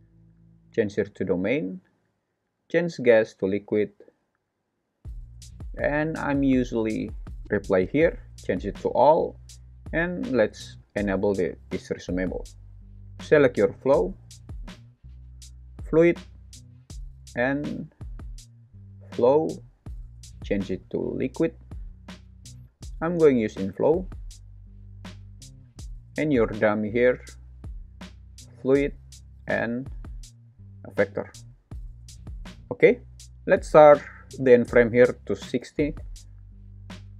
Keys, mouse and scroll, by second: 2.6-3.7 drag, 7.8-8.8 drag, 12.0 click, 15.5 click, 16.4-19.1 drag, 20.1-21.6 drag, 22.5-23.9 drag, 25.6 click, 28.3 click, 29.7-31.0 drag, 32.2 super+s, 34.9 click.